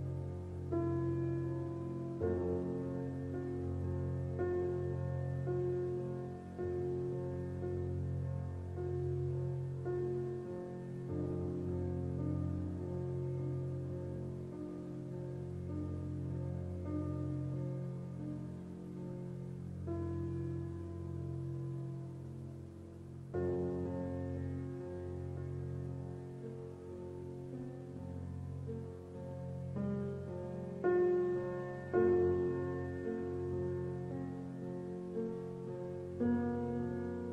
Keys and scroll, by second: 13.7 shift+e, 14.4 BackSpace.